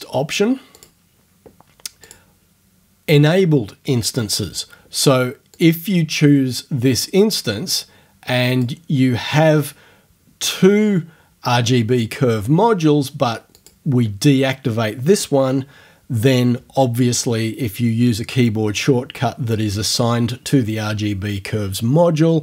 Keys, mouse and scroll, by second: 0.8 click, 2.1 click, 5.6 click, 8.5 click, 13.5 click.